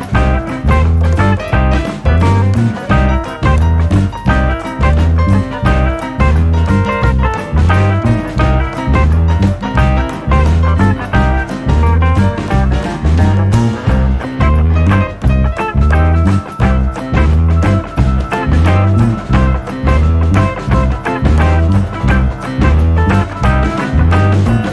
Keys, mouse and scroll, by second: 0.2 Tab, 0.9-1.3 scroll down 4, 1.3-1.8 scroll up 2, 3.5 click, 5.5 click, 10.2 click, 12.2 click, 14.0 click, 18.6 click, 22.5 click.